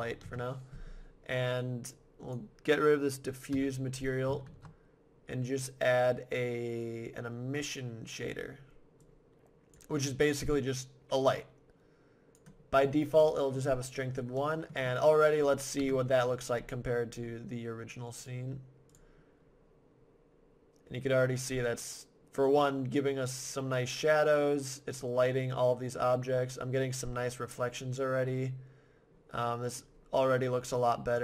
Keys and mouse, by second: 3.5 x, 4.4 shift+a, 9.0-10.3 drag, 12.7 click, 15.8 KP_0, 16.5 middle click, 18.5 click, 19.5 click, 20.4-22.2 middle drag, 31.1-31.2 drag.